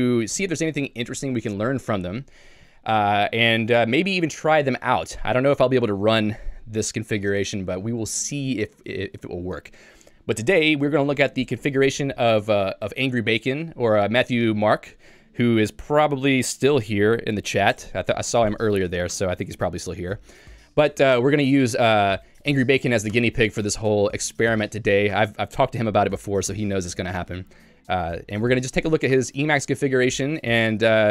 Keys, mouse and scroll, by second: 19.5 Escape.